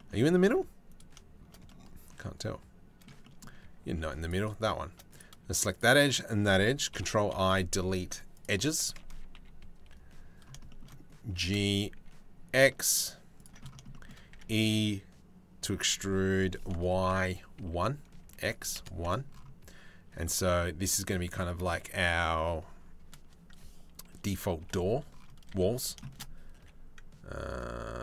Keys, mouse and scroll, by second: 0.0 ctrl+r, 1.3 click, 3.5 ctrl+r, 6.6 ctrl+i, 6.9 Delete, 8.7 a, 9.0 KP_3, 9.4 KP_1, 10.3 shift+middle click, 10.9 g, 13.9 e, 19.8 Tab, 24.2 KP_7, 25.1 z, 26.2 g.